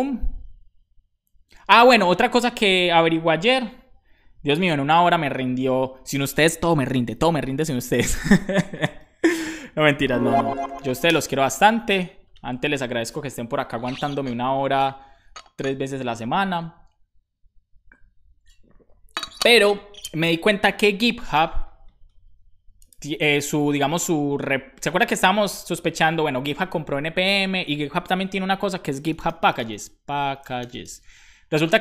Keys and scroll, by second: 10.0-11.2 typing.